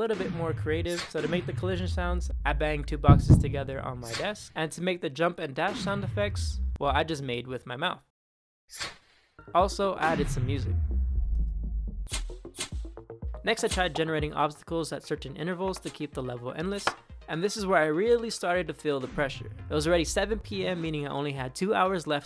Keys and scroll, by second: 0.0 Down, 0.7 Up, 1.0 Down, 5.5 Down, 6.6 space, 8.6 Up, 9.8 Down, 11.9 Up, 12.4 Up, 13.0 Right, 13.5 Up, 13.8-18.0 typing, 18.8 Down, 20.3 Down.